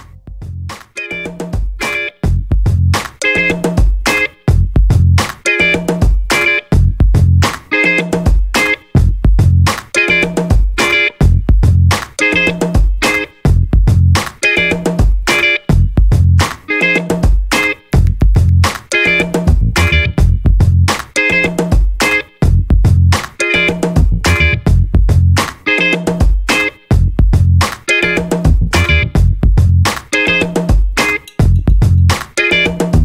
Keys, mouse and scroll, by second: 0.6 scroll up 2, 1.2-1.6 scroll down 2, 2.0 scroll up 2, 2.9 click, 4.9 click, 5.4 click, 6.2 scroll down 2, 6.6-6.9 scroll up 2, 7.1-9.7 drag, 9.9 scroll down 2, 10.5-11.9 drag, 13.4 click, 14.8 click, 15.6 click, 16.4 click, 17.7 click, 18.5 click, 20.0 ctrl+click, 21.4 ctrl+click, 22.2-23.9 ctrl+drag, 24.2-24.5 ctrl+scroll down 1, 24.7-25.3 ctrl+scroll up 1, 25.8-26.2 ctrl+scroll up 3, 27.6-28.3 ctrl+scroll down 4, 28.7 ctrl+click, 30.3 ctrl+click, 30.9-33.0 ctrl+drag.